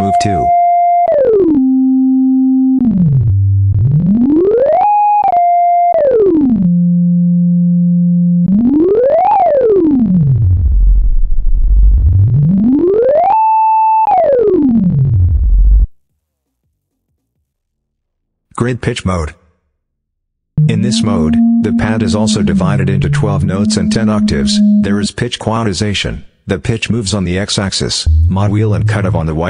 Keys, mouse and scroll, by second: 19.2 click, 20.4-25.0 drag, 26.9 click, 27.8-29.1 drag.